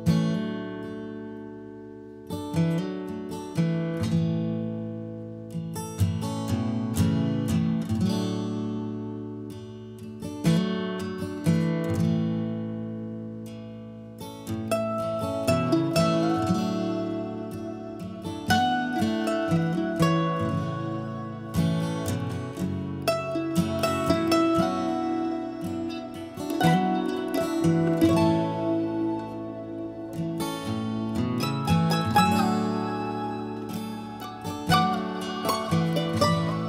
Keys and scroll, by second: 12.9 b, 25.6 Escape, 29.2 Escape, 29.7 ctrl+a, 30.2 ctrl+h, 31.5 m, 33.7 Escape, 33.7 Escape, 33.9 Escape, 34.2 h, 35.3 ctrl+h, 35.6 ctrl+h.